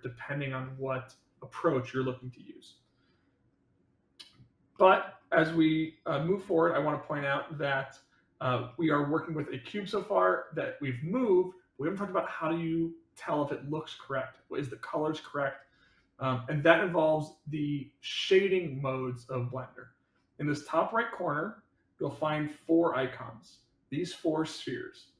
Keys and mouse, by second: 4.7 middle drag, 5.5-7.1 middle drag, 8.6-10.9 middle drag.